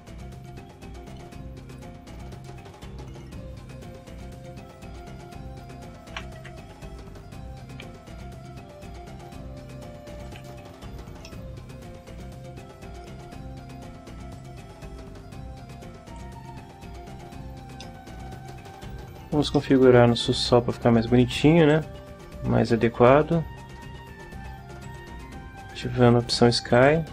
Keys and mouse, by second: 0.4 shift+right click, 1.0 shift+right click, 1.7 shift+right click, 2.7 shift+right click, 3.6 shift+right click, 4.6 shift+right click, 5.5 shift+right click, 6.4 shift+e, 6.8 shift+z, 7.7 z, 10.2 click, 10.8 Tab, 11.2 middle click, 11.4 click, 11.4-13.0 middle drag, 14.4-16.3 drag, 16.3 middle click, 17.8 middle click, 18.8 right click, 19.5 middle click, 21.7 click, 24.8 click, 26.7 click.